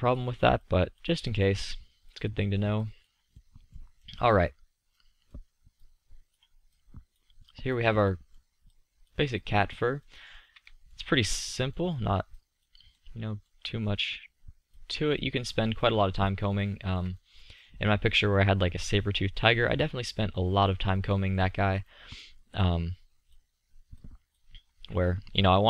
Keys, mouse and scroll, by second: 3.6 middle click, 11.1-12.4 drag, 12.4-13.2 middle drag, 13.3-15.0 middle drag, 15.0-16.8 drag, 16.8-19.6 middle drag, 22.8-24.8 drag.